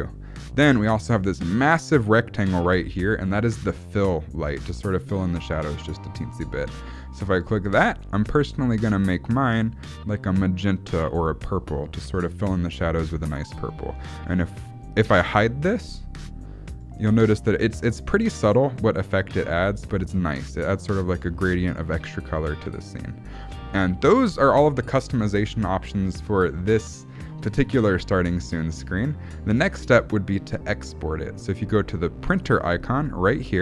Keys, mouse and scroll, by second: 7.3 click, 8.4 click, 16.2 click, 16.8 click, 17.2 click, 17.6 click, 19.6 click, 20.0 click, 20.7 click, 21.2 click, 21.7 click, 22.1 click, 32.4 click.